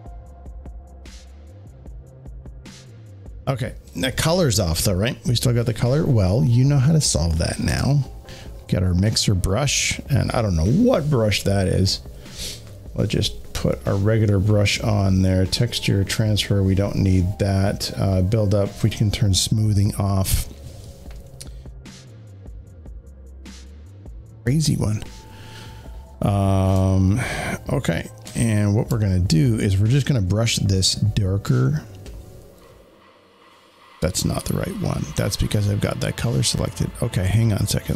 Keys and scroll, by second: 7.6 w.